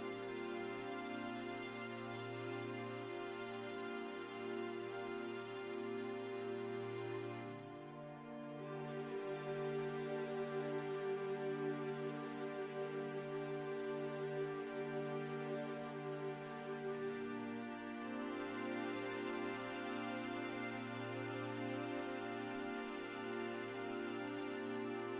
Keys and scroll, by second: 12.9 shift+s, 13.6 shift+s, 13.9 ctrl+z, 14.2 shift+s, 15.5 shift+s, 16.0 shift+s, 17.8 shift+s.